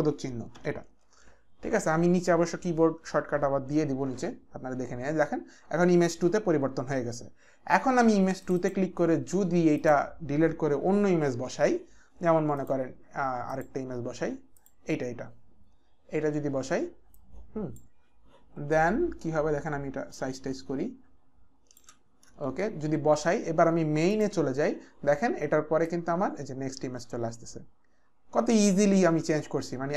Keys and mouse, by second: 0.5 ctrl+alt+/, 8.6 click, 9.8 click, 11.3 Delete, 12.6 click, 13.5 Delete, 13.5 click, 15.4 click, 17.1 click, 20.2 alt+shift+click, 24.1 click, 25.9 click.